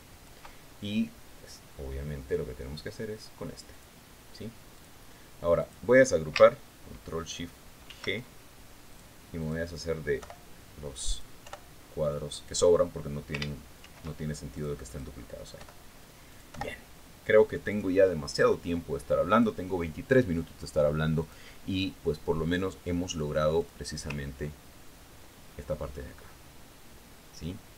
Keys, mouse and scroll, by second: 5.2 click, 6.2 click, 7.1-7.5 drag, 9.3 ctrl+shift+g, 10.4 click, 10.9 click, 11.7 Delete, 12.6 click, 12.9 Delete, 13.8 click, 15.3 ctrl+shift+g, 16.1 click, 16.4 click, 17.1 Delete, 17.8 click, 18.0 Delete, 19.2 click, 20.8 click, 22.7 click, 25.1 click, 25.7-26.5 ctrl+scroll down 2, 26.5-27.2 ctrl+scroll up 2, 27.2-27.7 scroll up 1.